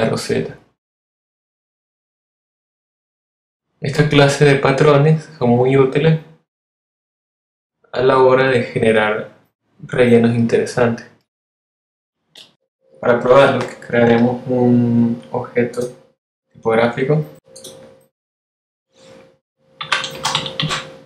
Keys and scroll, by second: 2.4 super+v.